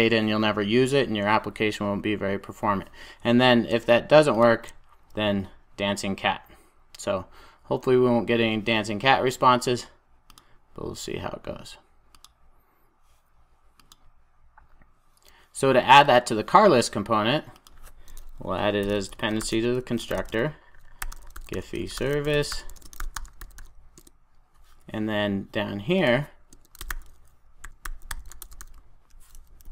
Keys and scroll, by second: 4.4 super+b, 24.0 Return.